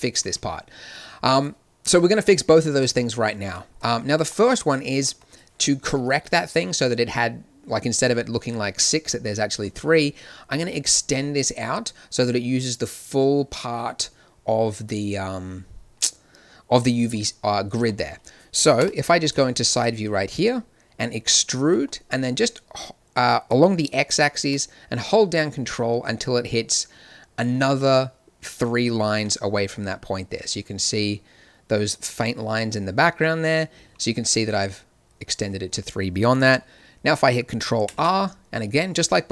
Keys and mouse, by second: 2.8 shift+z, 3.4 Tab, 4.9-6.2 drag, 6.7 click, 18.8 KP_1, 21.2 e, 37.8 ctrl+r.